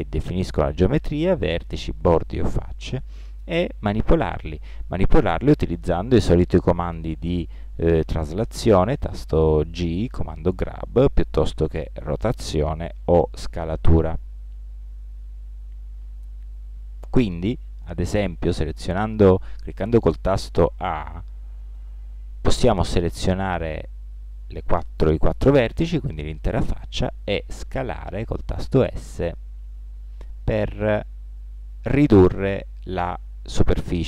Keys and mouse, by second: 5.0 g, 11.4 r, 13.2 s, 20.9 a, 21.8 a, 27.8 s.